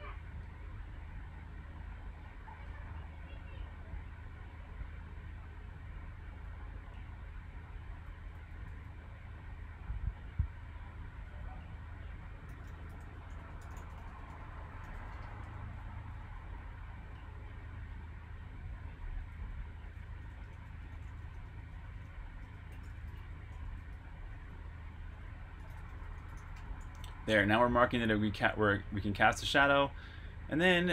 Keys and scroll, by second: 7.8-8.6 typing, 12.2-16.3 typing, 18.7-24.0 typing.